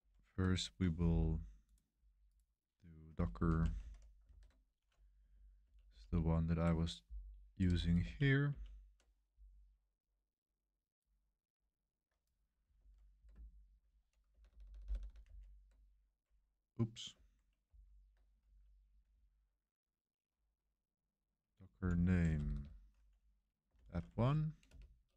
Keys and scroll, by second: 0.2 super+3, 2.8-4.3 typing, 4.3 super+3, 5.3 Up, 5.6 Up, 5.8 Up, 8.0 Up, 8.5 Up, 12.7 super+1, 13.0 super+1, 14.3-15.0 typing, 15.2 super+v, 17.6 ctrl+c, 18.4 Up, 19.1 Left, 19.6-21.1 typing, 19.9 Left, 20.3 Left, 20.4 Left, 20.5 Left, 20.6 Left, 20.7 Left, 20.8 Left, 20.9 Left, 21.2 Left, 21.3 Left, 21.4 Left, 21.7 Left, 22.3-24.6 typing.